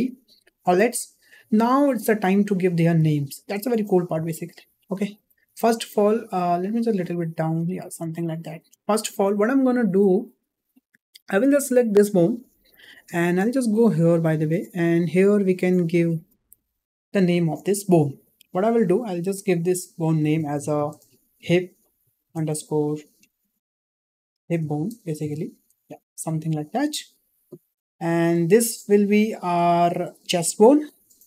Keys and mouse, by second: 3.2 shift+middle drag, 4.3 shift+middle click, 5.2 shift+middle drag, 6.6-7.7 drag, 8.1 shift+middle click, 11.8 click, 19.0-29.1 drag, 30.5-31.2 drag.